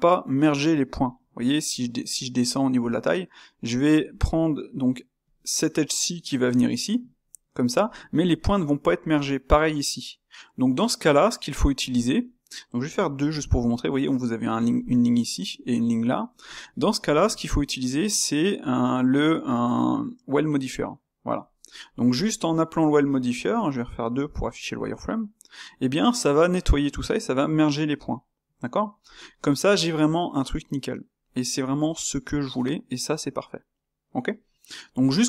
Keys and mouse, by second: 10.4-20.8 middle drag, 21.8-25.2 middle drag, 25.8-28.7 middle drag, 29.1-32.1 ctrl+middle drag, 34.4-35.2 middle drag.